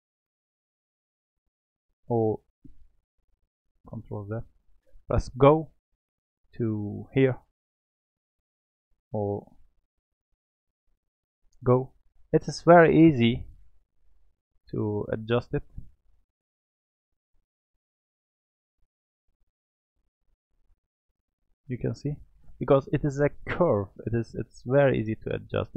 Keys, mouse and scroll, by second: 3.9 ctrl+z, 5.3 g, 9.5 ctrl+z, 10.1 click, 11.5 g, 14.1 click, 15.7 g, 17.8 click, 20.0 g, 21.4-24.6 middle drag.